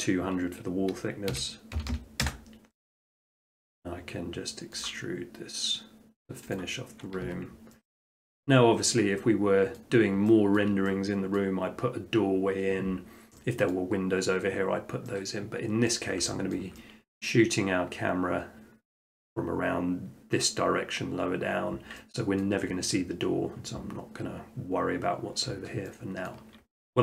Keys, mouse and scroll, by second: 1.3-1.8 typing, 2.2 Return, 3.3 middle click, 3.5 middle click, 3.7 middle click, 4.8 click, 6.6 click, 7.3 Tab, 8.4 middle click, 8.7 middle click, 8.8 middle click, 9.8 middle click, 10.6 shift+middle click, 11.4 middle click, 13.7 middle click, 15.9 middle click, 16.6 shift+middle click, 17.6 middle click, 17.9 middle click, 18.1 middle click, 18.7-19.1 scroll, 22.4 scroll, 26.3 middle click.